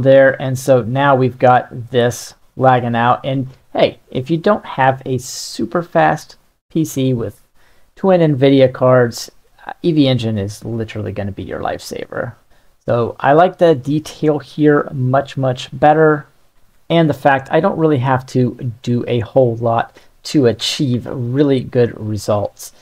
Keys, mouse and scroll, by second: 9.3-10.3 middle drag, 10.6-12.9 ctrl+middle drag, 13.0-13.6 middle drag, 19.6-20.7 middle drag, 21.0-22.1 ctrl+middle drag, 22.3-22.8 middle drag.